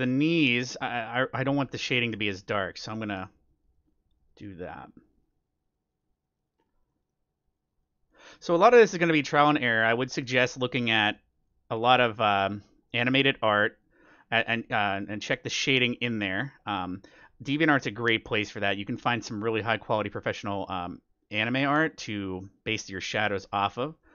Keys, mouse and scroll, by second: 6.5-12.2 middle drag, 12.3-13.8 middle drag, 16.1-19.4 middle drag, 19.5 middle click, 19.9-24.1 middle drag.